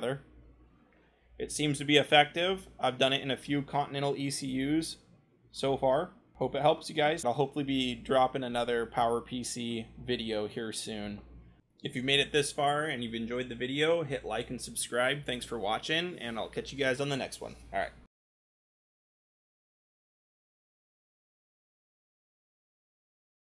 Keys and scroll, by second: 0.2-0.9 scroll, 4.6 Right, 4.6 scroll, 23.2-23.5 scroll.